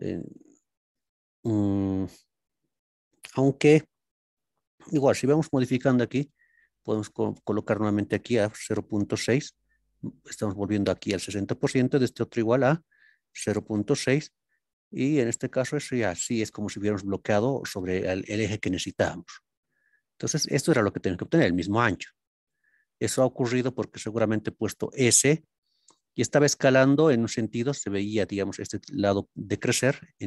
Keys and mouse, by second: 6.2-9.9 drag, 12.8-15.2 drag, 15.2-17.8 middle drag, 19.4-20.3 middle drag, 22.3-22.8 middle drag, 29.6 middle click.